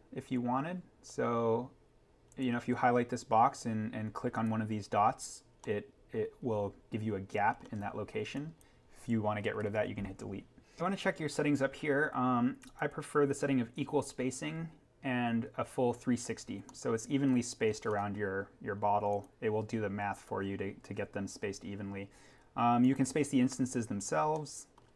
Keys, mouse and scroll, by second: 1.1-1.6 scroll down 1, 2.3 click, 5.3-5.9 scroll down 1, 5.9 scroll, 8.3 click, 9.7 Delete, 10.8 click, 12.6 click, 16.2-16.7 scroll up 1, 16.7 middle click, 16.9 scroll, 19.2 click, 23.8 scroll down 1, 24.4-24.9 middle drag.